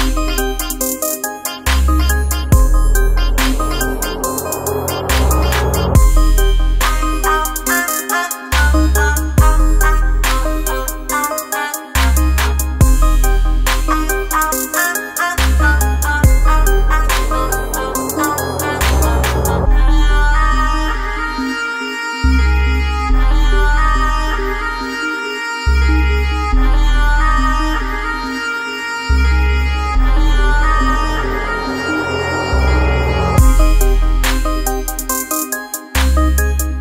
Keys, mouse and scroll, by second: 0.0-3.1 drag, 3.1-13.0 drag, 13.0 ctrl+z, 13.4 click, 14.1 ctrl+z, 14.5-17.2 drag, 19.9 click, 23.0-27.2 drag, 32.3 click, 34.4 scroll down 1.